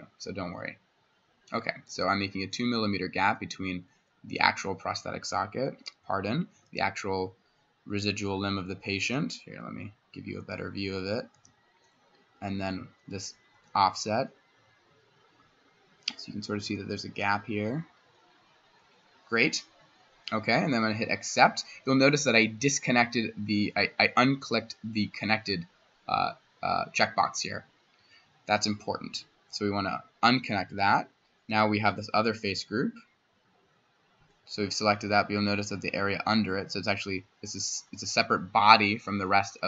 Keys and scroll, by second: 6.6 c, 10.4 c, 11.3 c, 13.6 c, 16.6 c, 30.7 Escape, 31.5 s.